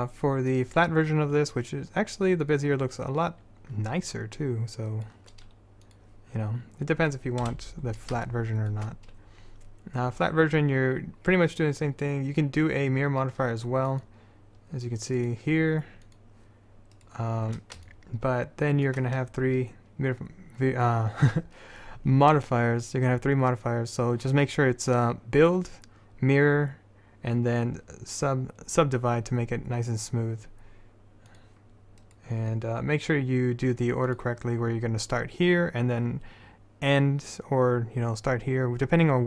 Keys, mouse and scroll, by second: 0.7-2.1 drag, 4.1 middle click, 6.0 middle click, 7.0-8.4 middle drag, 7.6 KP_7, 10.8 middle click, 14.1-15.3 drag, 15.3-18.9 middle drag, 31.4-34.4 drag, 32.2-33.2 right drag.